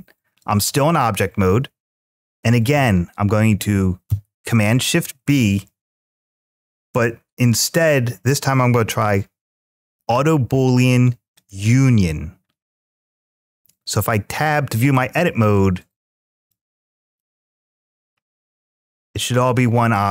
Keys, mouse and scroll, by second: 0.8-2.3 middle drag, 3.9 ctrl+shift+b, 4.3-6.1 middle drag, 12.4-12.8 scroll up 2, 14.1 Tab, 14.7 middle click, 16.1 click, 16.9 click, 17.6 click, 18.1-20.1 middle drag.